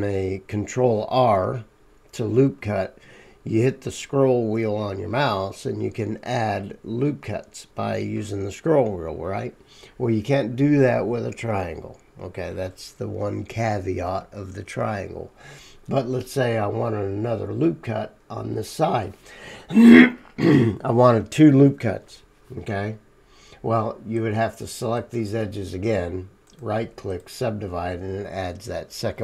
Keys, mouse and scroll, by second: 24.2-29.2 middle drag, 28.4-29.2 drag, 28.4-29.2 right drag.